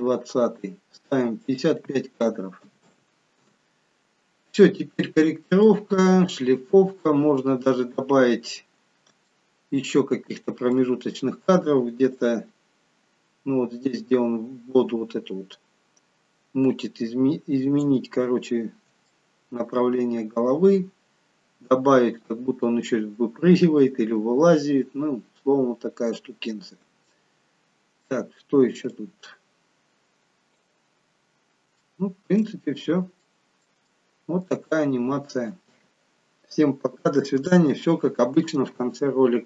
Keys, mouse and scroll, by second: 1.5 click, 2.9 5, 5.0-5.6 scroll down 5, 5.6 middle click, 6.8-7.4 scroll up 7, 7.4-8.3 scroll down 1, 8.3-8.7 scroll down 1, 9.4 shift+middle click, 10.8 middle click, 12.3 click, 18.6-19.2 scroll up 4, 19.2 shift+middle click, 24.9-26.0 scroll down 2, 26.0-26.7 scroll down 2, 26.7 scroll up 4, 27.0 shift+middle click, 29.0 click, 31.0-31.9 scroll down 9, 31.9 shift+middle click, 32.6-33.4 scroll up 2, 33.4 middle click, 33.4-33.9 scroll up 2, 34.0 shift+middle click, 34.7 middle click.